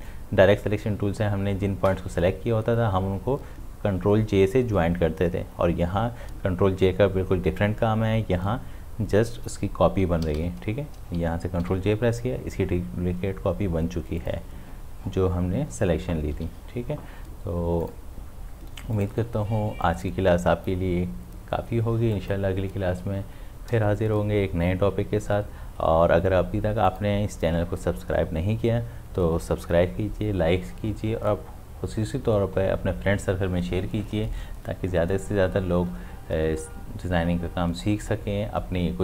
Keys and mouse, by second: 10.2 ctrl+z, 11.6 ctrl+j, 14.2 click, 16.4 v, 17.8-22.2 drag, 26.9 click.